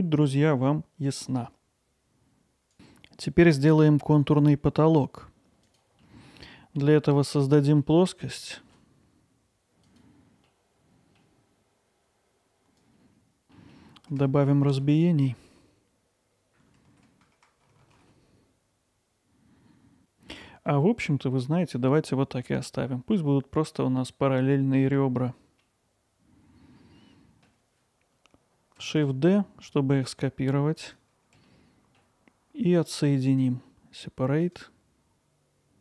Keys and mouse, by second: 6.0 middle drag, 6.5 alt+middle click, 7.0-7.3 ctrl+alt+middle drag, 7.5-8.4 middle drag, 9.3 middle click, 10.1 click, 11.2-11.8 middle drag, 12.6 shift+p, 13.0 middle click, 13.1 alt+middle click, 13.3 ctrl+alt+middle click, 13.5 middle drag, 16.9 ctrl+r, 18.8 click, 19.0 alt+middle click, 19.6 middle click, 20.0 alt+middle click, 25.6-27.5 alt+middle drag, 29.0 shift+d, 31.5 alt+middle click, 33.4-33.8 right drag, 34.5-35.8 right drag.